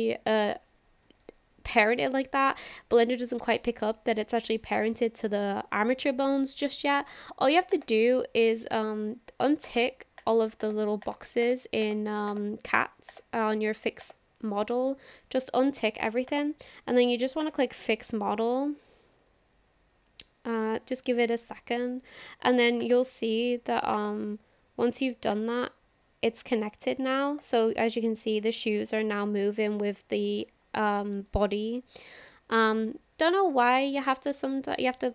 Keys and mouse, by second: 7.7-13.2 drag, 14.0-16.4 drag, 17.4-21.8 drag, 22.8 click, 25.4-27.4 drag, 28.4-28.8 shift+middle drag, 29.4-29.8 shift+middle drag, 31.3-31.7 shift+middle drag, 33.4 click, 34.7-35.1 shift+middle drag.